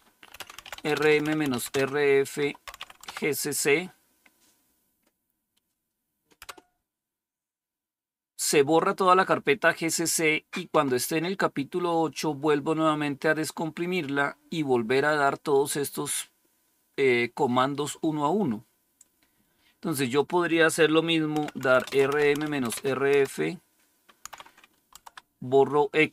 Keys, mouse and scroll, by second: 0.0-3.2 typing, 6.3 Return, 20.0 click, 21.0-23.0 typing, 24.2 typing, 24.9 Tab, 26.0-26.1 typing.